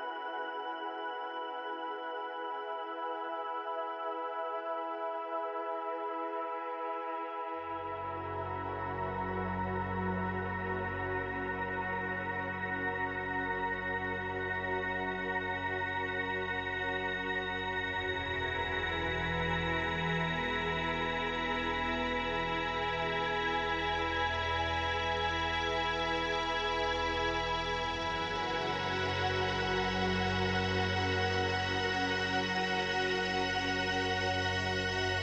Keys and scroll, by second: 4.4 ctrl+z, 5.9 ctrl+z, 19.9 space, 23.1 space, 32.6 space.